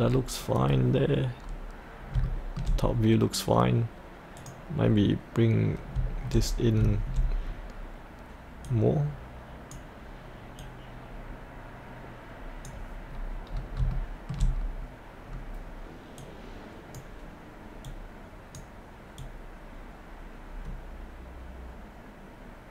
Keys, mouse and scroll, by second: 2.7-3.8 scroll up 1, 4.4 click, 5.8 scroll up 1, 7.4 scroll down 1, 8.7-13.1 drag, 13.1-13.5 scroll up 1, 13.9 shift+middle click, 14.5 scroll up 1, 16.2-22.7 drag.